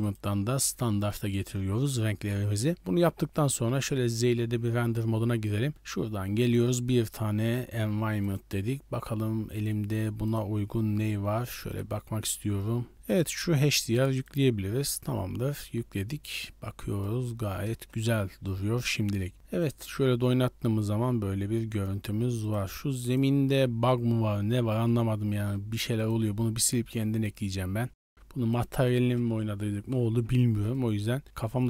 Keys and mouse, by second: 0.0-3.8 drag, 3.8 z, 6.4-7.6 drag, 8.2-8.6 drag, 16.3-16.9 middle drag, 17.6 KP_0, 19.5 click, 23.0 click, 23.5-23.8 middle drag, 24.4 z, 24.8 right click, 25.8 x, 26.5 shift+a, 27.8 s, 30.2 Tab, 30.5 2, 31.2 g, 31.5 right click.